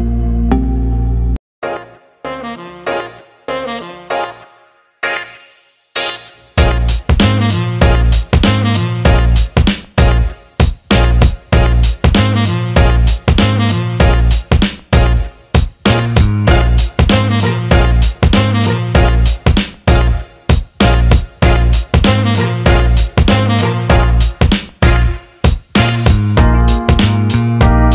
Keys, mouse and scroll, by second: 0.6 Tab, 1.0 click, 2.2 alt+middle click, 2.7 alt+shift+middle click, 3.6 click, 5.4 alt+middle click, 5.7 alt+shift+middle click, 6.0 alt+middle click, 6.8 click, 7.7 alt+middle click, 8.5-9.9 drag, 10.3 alt+middle click, 11.2 alt+middle click, 11.5 Tab, 12.7 alt+middle click, 14.2 click, 16.9 alt+middle click, 20.3 shift+click, 21.0 shift+click, 22.6 ctrl+KP_Add, 25.8 middle click, 26.6-27.7 drag.